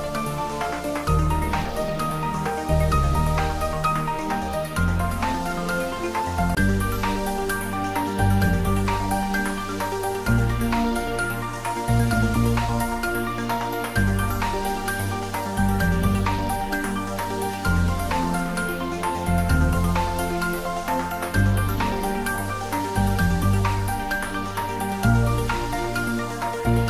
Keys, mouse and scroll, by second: 2.5 click, 2.7 s, 3.1 y, 17.2 y, 17.4 click, 20.5-22.4 scroll up 1, 23.9-24.8 typing.